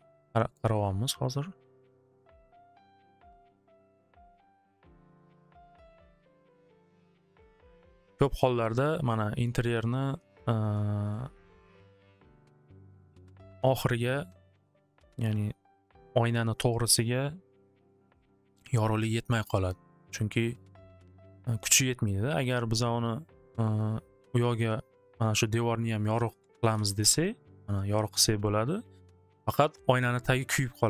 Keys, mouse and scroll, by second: 2.1 click, 2.9-4.5 drag, 5.7 click, 7.5-10.8 drag, 25.5 click, 26.4 click, 26.6 click, 26.7 2, 27.0 Return, 27.4 Return.